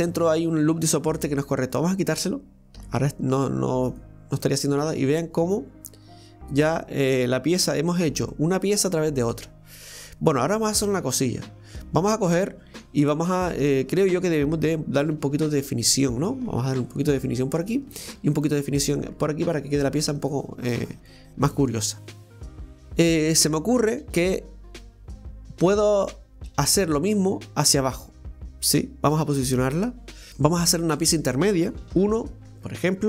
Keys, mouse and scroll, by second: 0.4 scroll up 1, 1.3 right click, 1.7 alt+shift+right click, 1.9 alt+shift+right click, 2.8 x, 4.8 scroll down 1, 5.1-7.7 middle drag, 7.7 Tab, 8.0 scroll down 1, 8.3-11.4 middle drag, 13.5-13.8 scroll up 2, 13.8 Tab, 20.6 scroll down 2, 21.1-23.1 middle drag, 31.9 middle click, 31.9 KP_1.